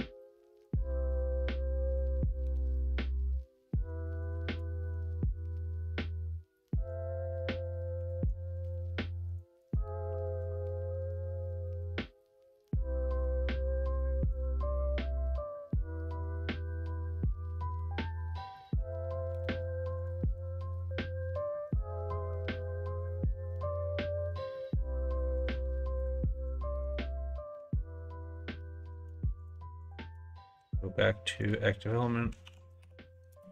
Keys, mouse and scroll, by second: 1.9 s, 4.9 ctrl+z, 6.0-7.4 middle drag, 8.0 1, 8.5 click, 9.2 click, 10.1 r, 16.8 middle click, 17.7 middle click, 18.7 3, 19.3 click, 19.9 click, 20.3 click, 20.7 click, 21.7 click, 22.0 shift+click, 23.0 click, 23.5 middle click, 24.3 click, 25.0 2, 25.4 click, 26.0 click, 26.8 click, 28.8 1, 29.4 shift+click, 29.8 shift+click, 30.5 `, 32.3 s.